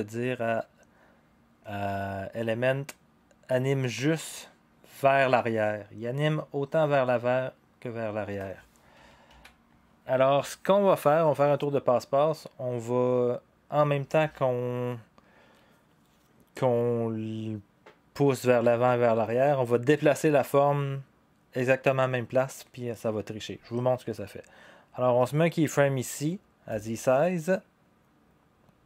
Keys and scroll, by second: 9.3 ctrl+z.